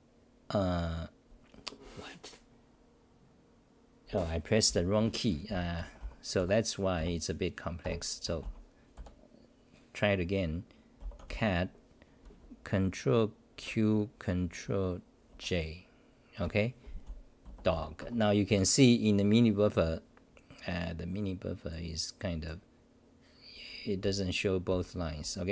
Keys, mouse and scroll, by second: 4.0 Delete, 4.1 ctrl+g, 5.5 t, 6.4 Delete, 6.9 Up, 7.8 ctrl+g, 8.9 Delete, 18.0 ctrl+q, 18.0 Home, 18.4 ctrl+=, 21.7 click, 22.4 click, 24.7 n.